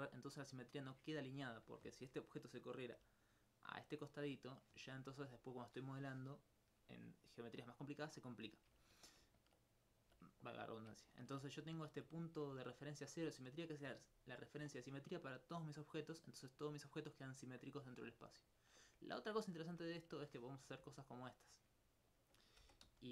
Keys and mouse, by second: 3.1 d, 3.5 click, 5.3 right click, 11.1 ctrl+alt+click, 11.9 alt+click, 12.3-16.5 right drag, 22.9 z.